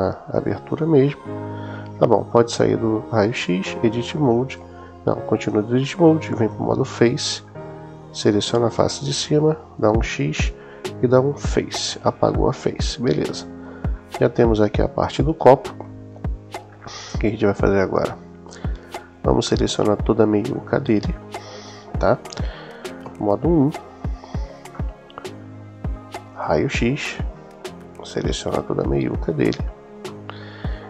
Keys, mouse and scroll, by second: 0.1 click, 3.1 click, 3.6 Tab, 4.4 Tab, 6.2 click, 6.8 middle click, 9.6 x, 12.2-13.5 middle drag, 14.2-16.2 middle drag, 22.8 KP_1, 24.5 middle click, 26.2 click, 27.5-29.1 drag, 29.9-30.8 middle drag.